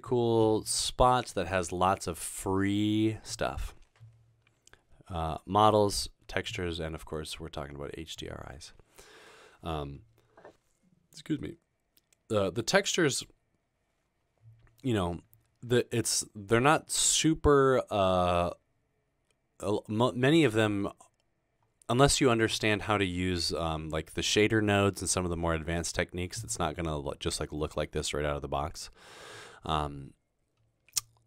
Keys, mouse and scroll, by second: 21.2 middle click, 21.2-22.2 scroll down 2, 21.7 middle click, 23.0-24.6 scroll down 2, 24.4 middle click, 25.9 middle click, 25.9-27.6 scroll down 3, 26.8 middle click.